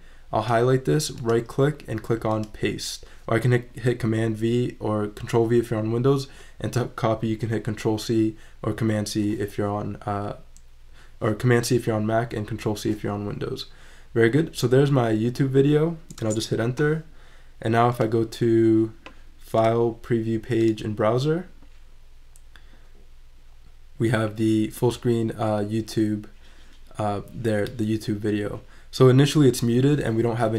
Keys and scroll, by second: 16.2 Return.